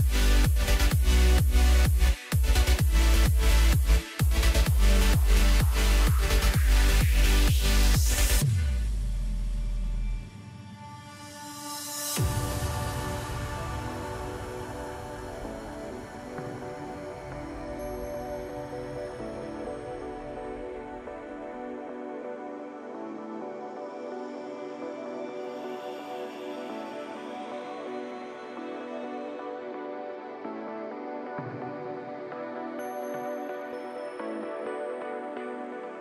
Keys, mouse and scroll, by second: 0.5-1.7 drag, 1.7 scroll down 3, 1.9-3.9 middle drag, 3.9-4.6 scroll up 1, 4.6 KP_1, 6.8 click, 8.3-8.8 scroll down 1, 8.8 click, 9.1 scroll down 3, 9.3-9.9 middle drag, 9.9 Tab, 10.3-11.4 scroll up 1, 11.4 click, 11.7 click, 12.3-13.1 scroll down 3, 13.1 shift+click, 13.3 shift+click, 13.8 scroll down 2, 14.0 middle click, 14.7-15.0 scroll up 1, 15.0 scroll down 2, 15.3 middle click, 15.9-17.1 scroll up 1, 17.1 shift+d, 19.0-19.5 ctrl+KP_4, 20.3 p, 22.1 Tab, 23.2 click, 23.8 click, 24.0-27.1 drag, 27.5-28.8 middle drag, 28.8 KP_Divide, 29.6-31.1 middle drag, 31.1-34.2 drag.